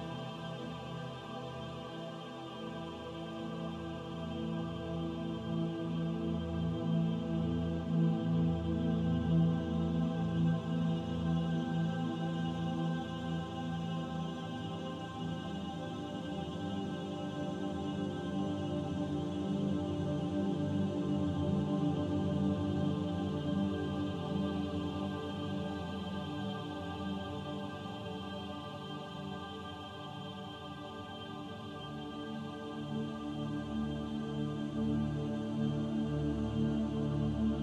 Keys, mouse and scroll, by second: 1.9 click, 14.7 click, 16.0 l, 17.0 p, 18.8 Tab, 19.5 middle click, 21.0 middle click, 21.6-21.9 scroll up 1, 22.4 Tab, 24.1 Tab, 24.5 click, 25.3 Tab, 26.5 click, 29.6 click, 30.1 click, 33.5 shift+click, 35.0 shift+click, 37.3 middle click.